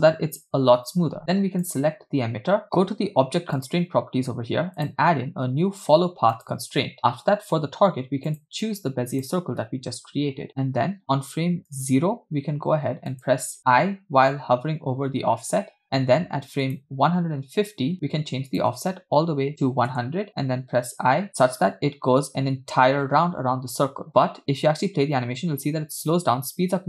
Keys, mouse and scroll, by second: 1.7 click, 3.8 click, 4.9-6.6 drag, 8.4-9.4 drag, 11.8 click, 13.2 click, 14.3 i, 16.7 click, 18.6-20.0 drag, 19.7 0, 20.8 i, 24.1 middle click, 24.1 scroll down 2, 24.7 space.